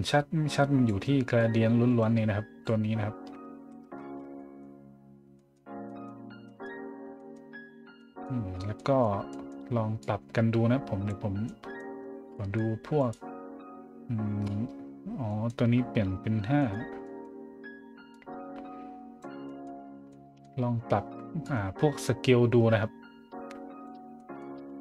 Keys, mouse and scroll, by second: 1.3-2.6 drag, 3.6 z, 4.4 middle drag, 5.4 middle click, 5.9 middle drag, 6.4 middle drag, 7.1 middle click, 7.7 scroll up 1, 7.9 middle drag, 8.5 scroll down 1, 8.7 middle click, 9.3 middle click, 10.0-11.1 drag, 11.4-11.8 scroll up 1, 12.0 scroll down 1, 12.3 scroll up 1, 13.0 right click, 15.3 middle click, 16.6 right click, 17.0 middle click, 18.1-19.2 drag, 19.4 middle drag, 19.8 scroll up 1, 20.1-20.4 middle drag, 21.4-23.8 drag, 24.2 middle click, 24.6 a.